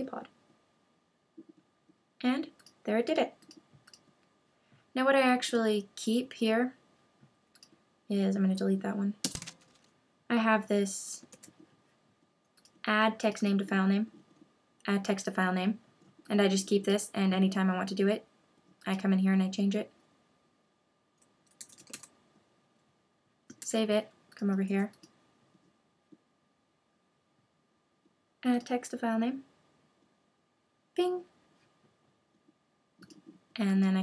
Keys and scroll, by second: 9.2 super+BackSpace, 11.3 super+w, 23.6 super+s.